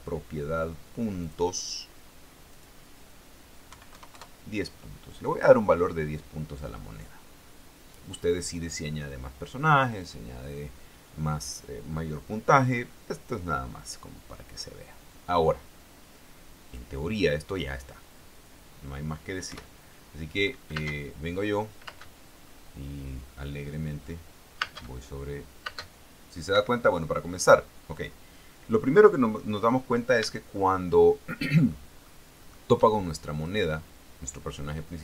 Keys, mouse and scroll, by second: 1.4 click, 2.7 click, 3.9 KP_1, 4.1 KP_0, 4.3 KP_Enter, 15.3-17.1 drag, 19.7 p, 21.5 space, 22.1 space, 25.4 space, 25.9 space, 26.7 Escape, 30.7-32.1 shift+middle drag, 32.3 shift+middle click, 33.6 right click.